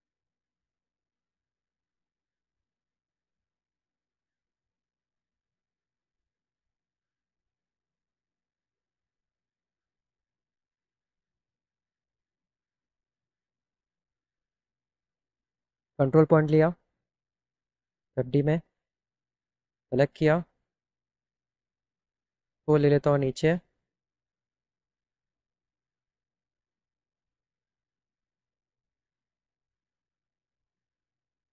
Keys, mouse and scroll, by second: 2.8 click, 3.3 click, 3.3 right click, 8.7 middle click, 10.1 click, 15.2 click, 18.3 click, 22.7 right click, 27.2 click.